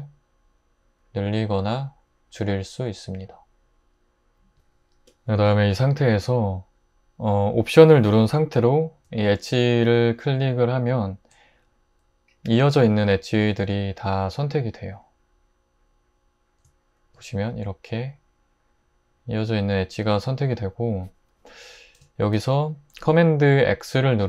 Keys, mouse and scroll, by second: 4.5 Tab.